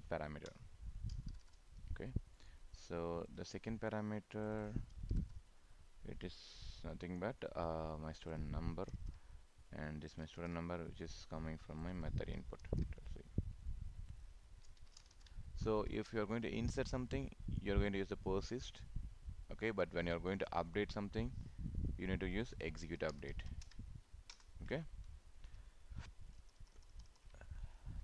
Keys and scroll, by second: 8.9 ctrl+c, 10.5 ctrl+v, 12.6 ctrl+c, 15.2 ctrl+v, 23.5 ctrl+space, 26.5 ctrl+s.